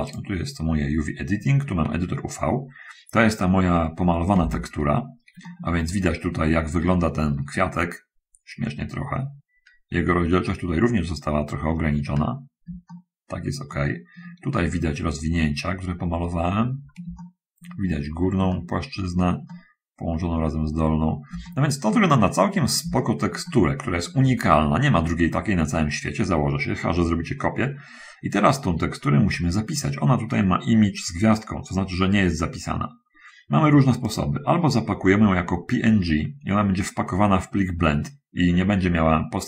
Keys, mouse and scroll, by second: 0.3 click, 2.2 middle click, 3.5 middle click, 4.3 shift+space, 5.3 shift+middle click, 5.7 shift+middle click, 6.2 shift+middle click, 8.1 middle click, 9.5 middle click, 11.7 scroll up 1, 13.1 shift+middle click, 13.9 shift+middle click, 15.9 middle click, 17.4 shift+middle click, 18.7 shift+middle click, 19.7 shift+middle click, 21.1-21.5 scroll down 2, 21.7 shift+middle click, 22.5-22.9 shift+scroll up 2, 23.2-24.3 shift+middle drag, 34.3 click.